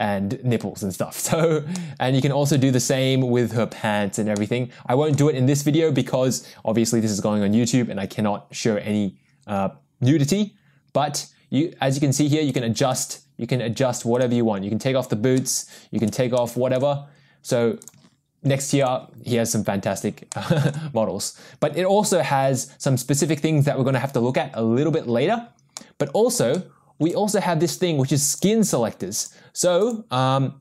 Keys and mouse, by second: 1.8-2.2 middle drag, 2.5-3.5 middle drag, 4.4-5.3 middle drag, 12.3 click, 12.6 click, 14.3 click, 15.4-16.0 shift+middle drag, 16.4-16.7 middle drag, 17.9 click, 18.9 click, 20.3 middle click, 25.8-26.3 middle drag, 26.5-27.1 shift+middle drag, 28.5 click, 29.2 click, 30.0 click.